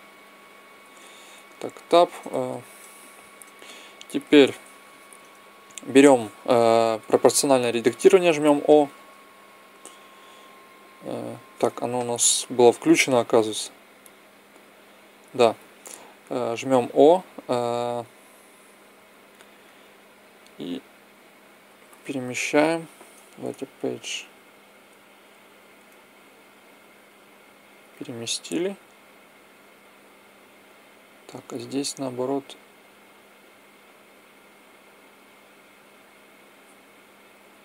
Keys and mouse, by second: 2.2-3.8 middle drag, 4.6 t, 6.7 o, 11.9 o, 19.1 middle click, 20.0-21.8 drag, 20.0 right click, 31.2-35.2 drag, 32.1-33.1 right drag.